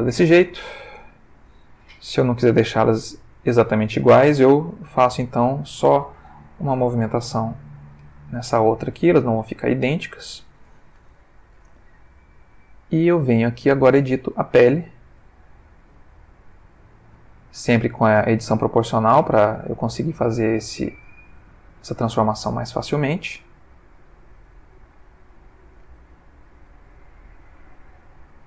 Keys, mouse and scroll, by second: 0.4 click, 2.1 l, 4.4 r, 5.3 click, 5.9 s, 6.1 z, 7.8 click, 8.0 g, 8.8 click, 9.4 g, 9.8 click, 11.4 click, 12.5 click, 13.7 click, 14.6 click, 15.7 click, 16.0 g, 16.9 click, 17.4 click, 17.6 g, 18.9 click, 19.3 click, 19.5 g, 20.1 click, 20.9 click, 21.0 g, 21.6 click, 22.5 click, 22.7 g, 24.2 click, 24.9 g, 25.6 click, 26.4 click, 26.5 g, 27.3 click, 27.7 click, 28.3 g.